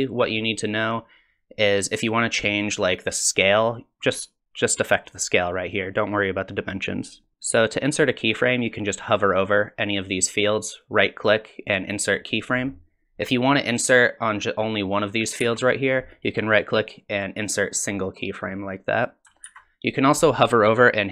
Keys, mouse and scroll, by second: 2.2 click, 10.7 right click, 15.4 ctrl+z, 16.1 right click, 19.5 ctrl+z.